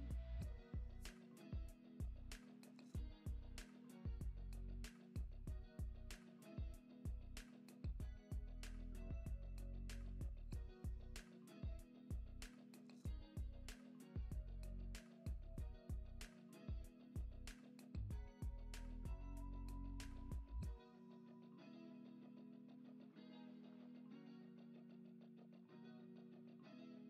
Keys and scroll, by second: 7.6 super+d, 12.6 Right, 13.2 Right, 13.7 Right, 24.5 Right, 25.2 Right, 25.7 Right.